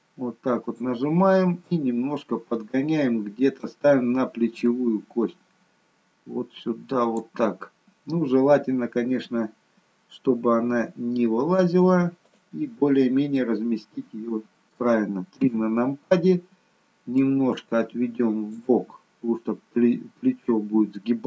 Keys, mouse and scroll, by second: 1.6 click, 4.6 click, 10.6 s, 13.3 middle click, 15.3 KP_3, 17.1 click.